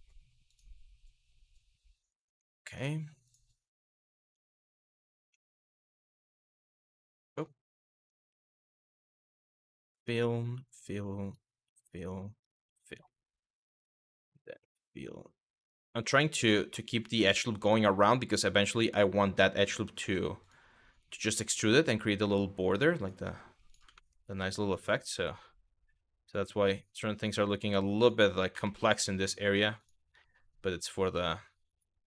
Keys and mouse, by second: 0.1 click, 1.8 click, 2.9 click, 4.2 click, 4.9 2, 5.2 click, 5.5 shift+click, 6.2 e, 7.9 ctrl+z, 8.9 d, 8.9 f, 10.0 shift+click, 10.5 click, 10.9 shift+click, 11.6 click, 12.0 shift+click, 12.7 middle click, 13.4 click, 14.0 click, 15.5 middle click, 16.2 middle click, 19.6 1, 20.8 g, 21.8 click, 22.7 g, 23.3 click, 23.7 middle click, 24.3 click, 27.6 click, 28.3 shift+middle click, 29.4 click, 29.8 e, 30.4 click, 30.6 e, 31.3 click.